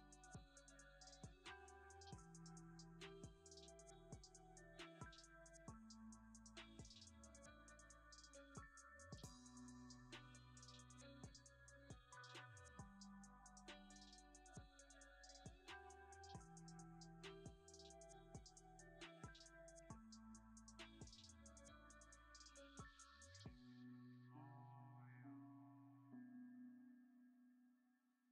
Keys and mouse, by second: 2.6 g, 3.7 middle click, 3.8 drag, 4.0 middle click, 5.2 middle click, 5.8 shift+middle click, 6.7 shift+middle click, 7.4 middle click, 7.7 Tab, 8.1 b, 9.4 ctrl+KP_Add, 10.7 p, 11.5 Tab, 11.9 click, 12.6 F2, 14.4 s, 17.9 click, 19.6 click, 23.2 click, 28.1 click.